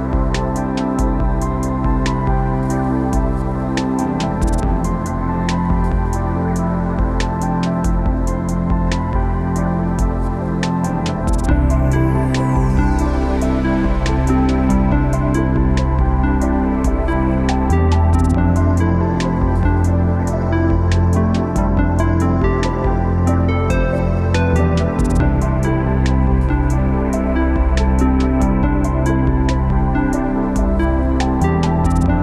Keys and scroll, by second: 16.0 0, 17.8 0.